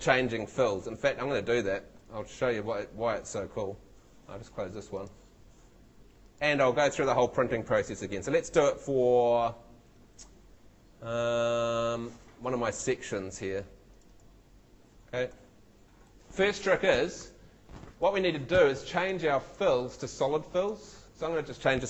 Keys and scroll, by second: 0.8 shift+super+Tab, 15.9 shift+Escape.